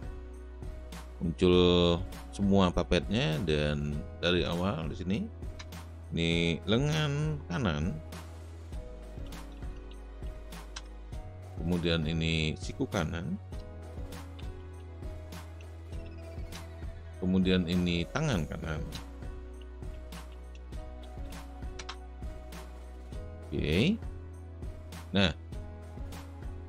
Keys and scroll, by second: 5.5 Return, 8.1-10.7 typing, 13.5 Return, 13.7-16.6 typing, 18.9 Return, 19.2-23.5 typing.